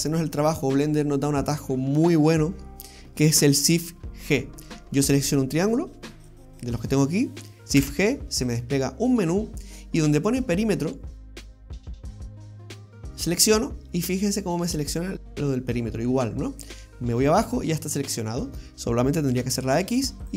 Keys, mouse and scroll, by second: 6.2 right click, 7.8 shift+g, 16.6-17.1 scroll down 3, 17.1 middle click, 19.3 x.